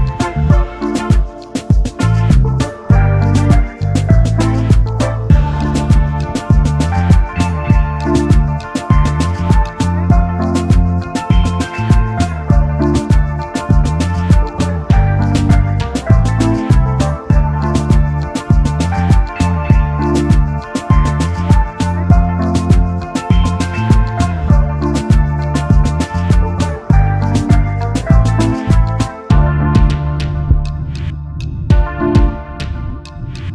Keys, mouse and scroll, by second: 5.3 shift+click, 6.1 v, 6.8-7.2 alt+scroll up 2, 8.3 alt+scroll down 1, 8.7 space, 9.4 space, 10.7 typing, 11.9 alt+click, 13.8 typing, 16.4 double click, 20.4 ctrl+d, 22.7 ctrl+d, 24.7 double click, 26.9 shift+click, 27.9 ctrl+3, 29.4 ctrl+z, 30.2 space, 30.8 alt+scroll down 1.